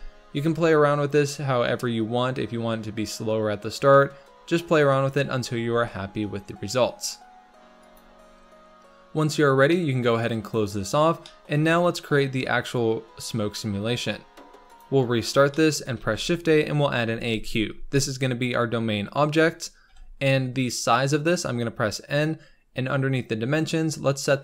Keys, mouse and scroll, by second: 5.6 g, 10.3 click, 11.2 shift+middle click, 11.5-12.2 scroll down 2, 12.2-13.7 scroll down 2, 13.7 scroll up 1, 14.7 click, 15.5-17.5 shift+middle drag, 17.5 shift+a, 18.4-19.2 scroll up 2, 19.8 n.